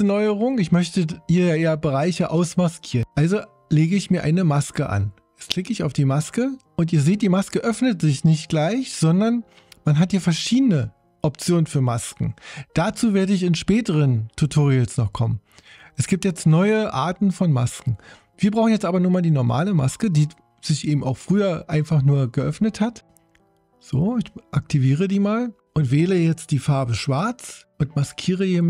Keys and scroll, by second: 26.7 x.